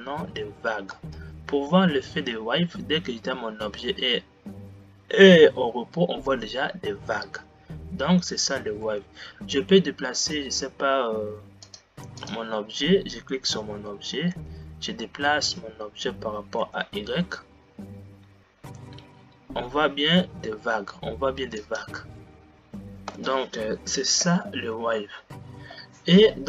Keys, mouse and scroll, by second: 1.1 space, 9.4 g, 13.4 click, 14.9 g, 23.7 space, 24.8 Left.